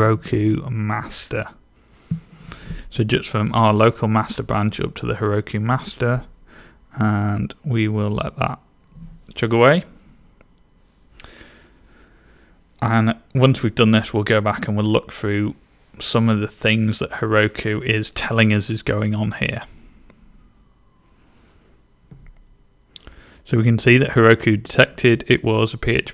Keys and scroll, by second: 0.0-0.9 typing.